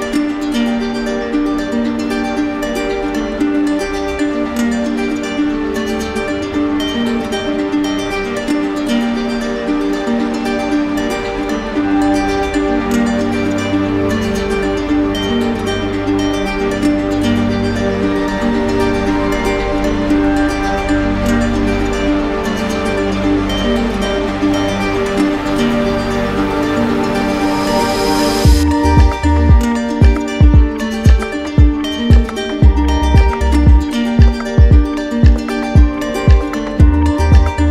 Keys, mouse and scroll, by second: 6.8 alt+click, 7.9-9.1 typing, 8.1 alt+click, 12.0 right click, 12.7 click, 13.7 right click, 15.4 shift+click, 16.8 shift+click, 17.6 ctrl+z, 18.0 ctrl+z, 20.7 shift+click, 21.6 shift+click, 22.8 shift+click, 24.0 d, 25.5 shift+click, 26.2 shift+click, 27.5 d, 28.5 shift+click, 29.3 shift+click, 29.9 shift+click, 30.8 shift+click, 31.3 shift+click, 32.2 d, 33.7 shift+click, 34.7 shift+click, 35.9 right click.